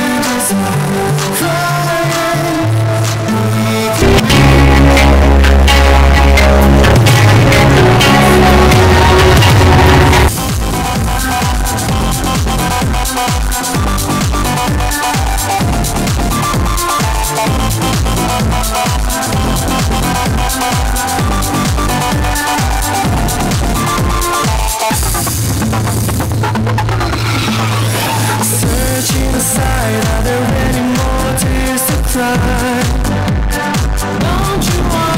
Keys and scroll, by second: 10.8 Page_Down.